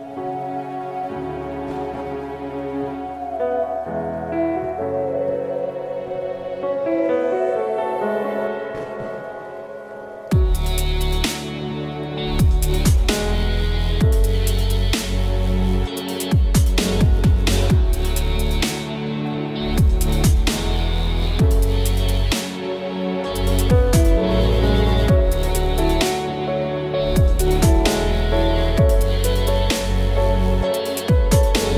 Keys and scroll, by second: 3.0 b, 6.4 ctrl+i, 9.7 ctrl+alt+shift+e, 26.9 j.